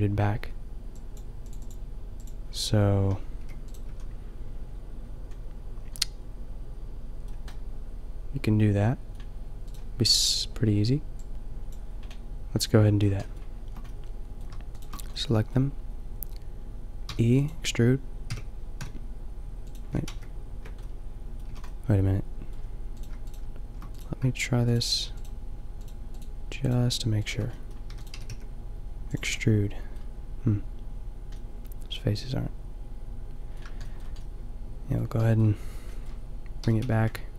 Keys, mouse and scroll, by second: 3.3 g, 3.8 a, 7.6 middle click, 8.3 middle click, 10.1-11.2 drag, 11.2 middle click, 11.3-14.2 middle drag, 17.0 e, 17.3 right click, 18.2 g, 19.6 right click, 20.0 ctrl+z, 21.4 a, 27.8 e, 28.1 g, 36.6 g.